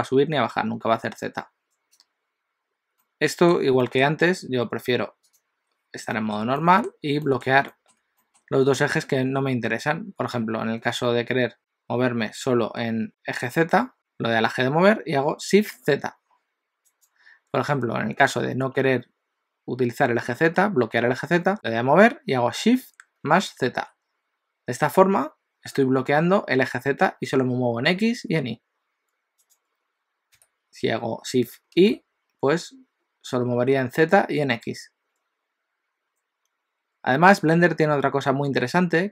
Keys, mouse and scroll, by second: 3.0 middle click, 3.9 shift+middle click, 5.3 click, 6.2 shift+middle click, 6.6 middle click, 7.8 shift+middle click, 8.2 middle click, 9.9 scroll down 1, 13.9 g, 21.5 g, 30.4 g, 38.5 g.